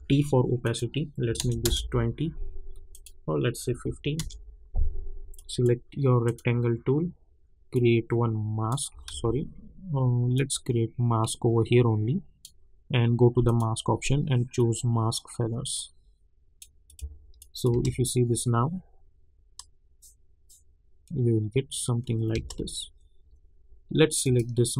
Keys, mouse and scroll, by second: 0.6 click, 1.6 Return, 2.9 click, 4.1 Return, 5.3-9.1 drag, 9.1 ctrl+z, 10.3-16.8 drag, 17.7 space, 22.3 space, 24.2 click.